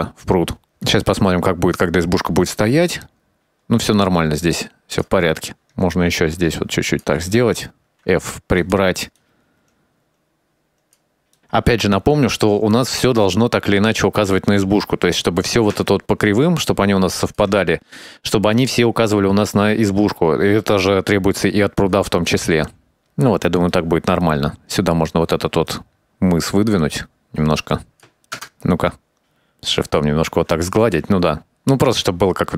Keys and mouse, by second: 1.3-5.1 drag, 5.8-7.4 ctrl+drag, 8.4 f, 9.2 click, 9.8 click, 10.2 ctrl+click, 10.7 click, 11.1 ctrl+click, 12.3-14.1 ctrl+drag, 16.0-17.5 ctrl+drag, 20.5-23.1 drag, 24.2 middle click, 24.9 click, 25.5 ctrl+click, 25.8 click, 26.3 ctrl+click, 26.7 ctrl+click, 27.6 ctrl+click, 27.9 ctrl+click, 28.0 ctrl+click, 28.8 KP_0, 31.2-32.5 drag.